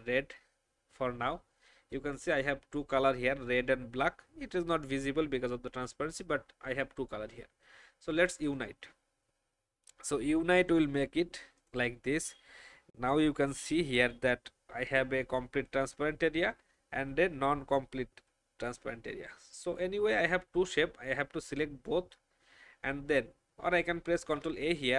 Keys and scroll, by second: 24.2 ctrl+alt+a.